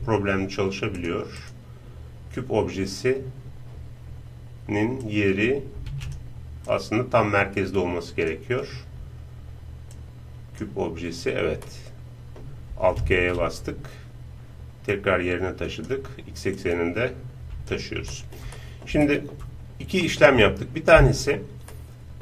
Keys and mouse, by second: 1.0-3.0 drag, 5.0-8.3 drag, 9.9-11.5 drag, 11.6-12.8 drag, 12.8-14.6 middle drag, 13.1 alt+g, 14.9-18.6 drag, 18.1-22.2 middle drag.